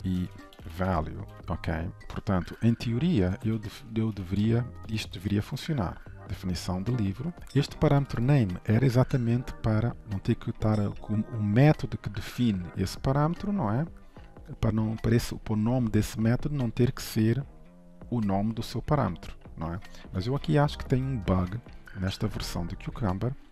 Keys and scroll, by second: 1.4 ctrl+s, 7.3 ctrl+s, 10.0 ctrl+w, 21.5 ctrl+shift+Right.